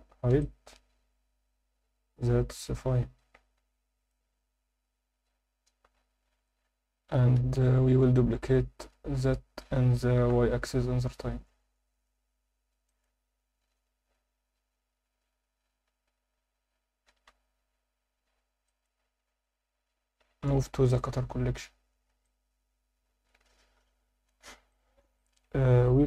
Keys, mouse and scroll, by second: 0.4-4.1 alt+middle drag, 7.0 scroll down 2, 7.4 alt+h, 8.3 Tab, 8.9-9.2 scroll up 1, 9.2 a, 10.6 shift+d, 10.9 y, 12.9 click, 13.6 scroll down 1, 14.1 Tab, 14.4 scroll down 1, 14.9 scroll down 1, 16.2 Tab, 16.2 scroll up 3, 17.4 g, 17.8 y, 19.4 Tab, 19.4 click, 20.4 m, 21.9 scroll down 2, 22.2-24.3 alt+middle drag, 24.7 click, 25.1 alt+shift+middle drag.